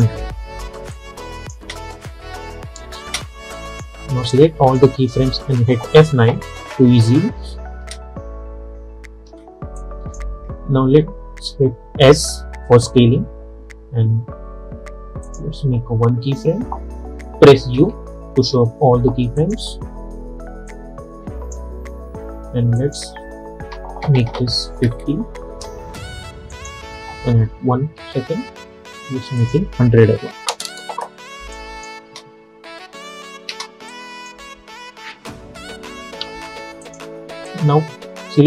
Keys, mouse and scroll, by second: 1.7 space, 3.6-6.1 drag, 6.1 F9, 7.9 space, 9.9-12.1 drag, 12.1 s, 15.3 click, 17.8 u, 18.5 u, 19.4-22.9 drag, 25.5 Return, 26.6 click, 28.1 k, 29.5 click, 31.1 Return, 31.6 click, 32.1 space, 34.0 click, 35.1 F9, 36.1 j, 36.9-38.4 drag.